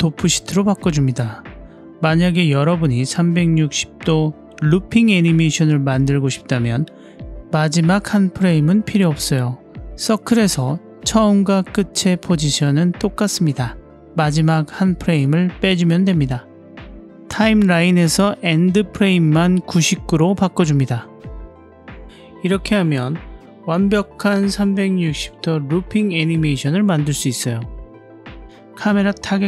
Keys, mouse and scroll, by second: 0.5 click, 2.8 click, 6.3 click, 7.3-8.3 drag, 12.1 Up, 13.4 Down, 14.1 Up, 17.4-19.3 drag, 20.5 click, 25.4 click.